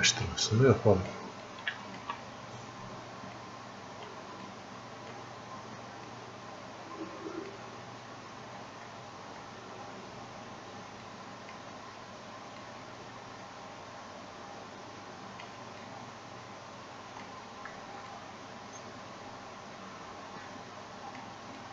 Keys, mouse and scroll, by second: 1.8-3.7 shift+drag, 3.7-9.5 drag, 9.5 scroll down 1, 11.4-15.9 drag, 15.9-21.7 drag.